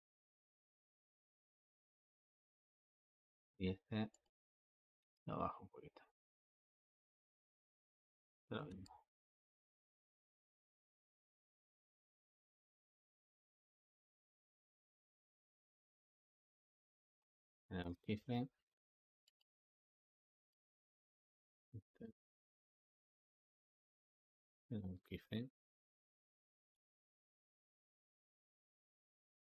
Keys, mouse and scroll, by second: 4.0 click, 4.7 g, 7.3-8.4 drag, 8.4 g, 11.6-13.9 drag, 13.9 g, 17.2 i, 19.1-21.1 drag, 21.8 g, 24.4 i, 25.5 click, 26.5 space.